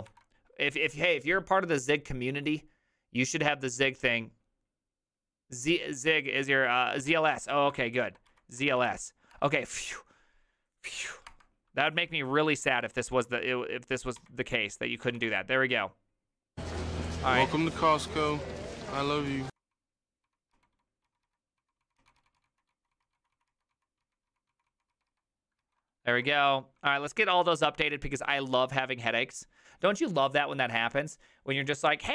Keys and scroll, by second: 7.2 alt+{, 7.5-9.4 typing, 11.3 Return, 12.6-26.2 typing, 26.2 ctrl+u.